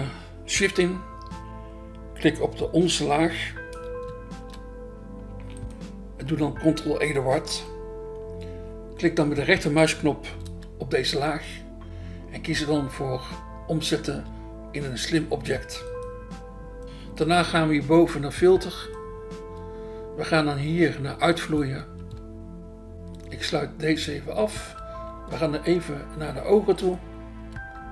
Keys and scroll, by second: 4.0 BackSpace, 7.5 ctrl+e, 11.0 BackSpace, 14.2 BackSpace, 15.4 BackSpace, 19.4 BackSpace, 22.0 BackSpace, 24.6 BackSpace, 25.2 BackSpace, 27.4 BackSpace.